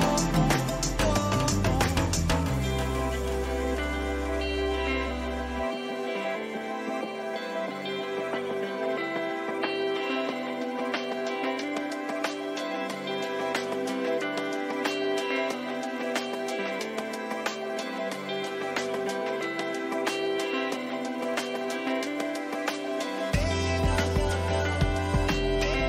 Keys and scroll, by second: 7.9 Return, 8.4 Down.